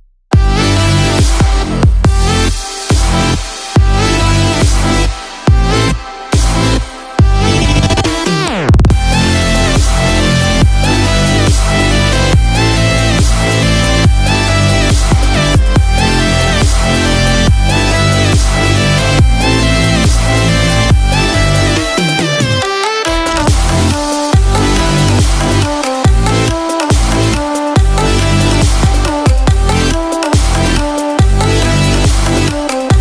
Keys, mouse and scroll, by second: 0.2 click, 1.5 click, 1.5-2.6 scroll down 4, 2.0 middle click, 3.2 scroll up 2, 3.5 middle click, 4.8 scroll up 1, 6.2 n, 6.7-7.0 scroll down 1, 7.1 shift+middle click, 7.5 middle click, 8.3 shift+middle click, 9.7 shift+middle click, 10.0 middle click, 10.5 shift+middle click, 10.9-11.4 scroll up 7, 11.3 shift+middle click, 11.7 middle click, 12.2-12.6 scroll down 2, 12.6 middle click, 13.7 click, 21.1 click, 21.1 shift+click, 22.8 shift+click, 23.6 shift+click, 24.2 shift+click, 25.7-27.1 scroll down 10, 27.6-29.1 scroll down 1, 32.4-33.0 scroll up 13.